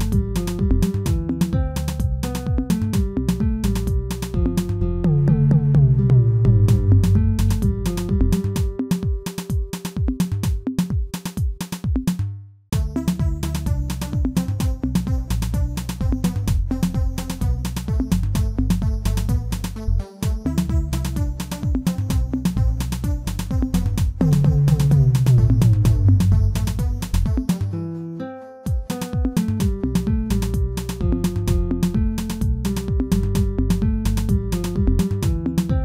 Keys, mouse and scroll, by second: 2.4 Tab, 4.5-7.5 drag, 10.3-11.4 drag, 11.4-12.1 scroll down 2, 12.1-12.5 middle drag, 12.5-13.4 scroll up 2, 13.4 Tab, 13.7 scroll up 1, 14.1-16.0 shift+middle drag, 16.0 alt+click, 17.1 g, 29.1 click, 30.2 Tab, 31.0 Tab, 34.2 click, 34.8 Tab, 35.2-35.8 scroll down 2.